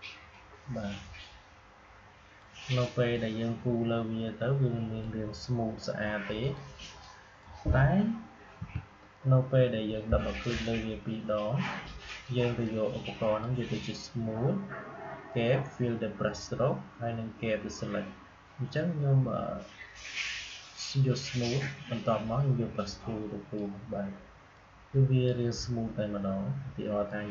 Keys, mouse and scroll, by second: 8.5 Delete, 10.2-27.3 drag.